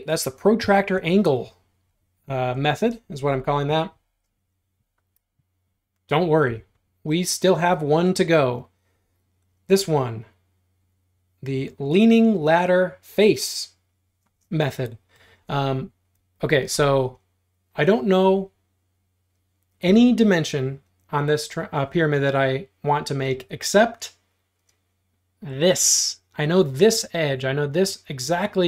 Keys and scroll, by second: 6.5 r, 14.3 space.